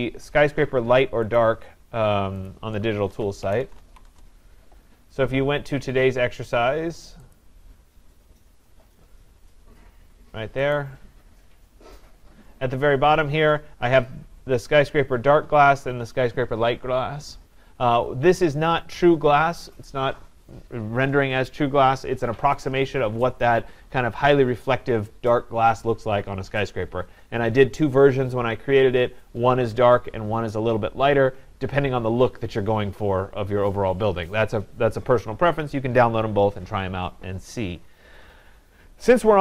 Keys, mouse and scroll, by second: 1.3 click, 1.4 click, 2.5 click, 3.4-4.1 typing, 7.4 click, 8.7-10.8 scroll, 10.8 click, 10.8 scroll, 12.1-12.6 scroll.